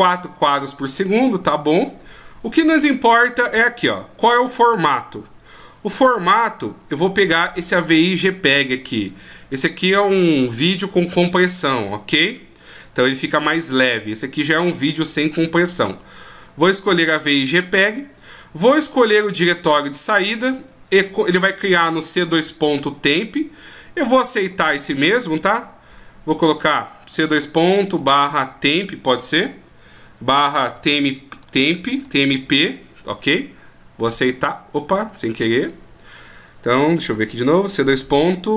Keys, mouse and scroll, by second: 1.7 scroll down 1, 4.8 click, 4.8 scroll down 6, 21.2 click, 23.3 click, 24.8 scroll down 2, 26.3 click, 26.3 scroll down 3, 35.7 click, 36.7 scroll down 4, 37.8 click, 37.8 scroll down 4.